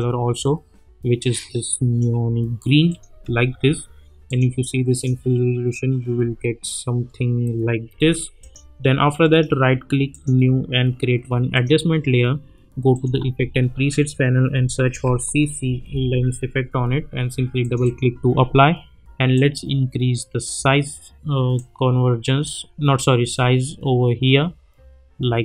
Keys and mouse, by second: 1.5-2.1 click, 3.1 space, 4.3 click, 6.2 space, 8.4 click, 9.2 right click, 10.1 click, 13.2 ctrl+a, 14.9-16.5 typing, 17.6-20.6 drag.